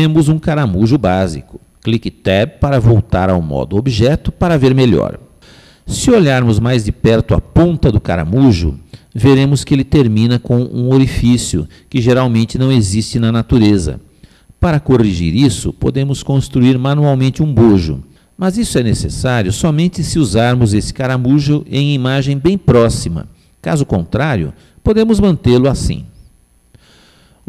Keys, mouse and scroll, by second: 5.3 Tab, 9.5-12.6 middle drag, 13.2-13.5 scroll up 1, 13.5-16.0 middle drag, 16.2-20.7 middle drag, 20.7-21.7 scroll up 1, 21.7-23.3 middle drag, 25.3 scroll down 1, 25.5 middle click, 26.4-27.2 scroll down 1, 27.2 middle click.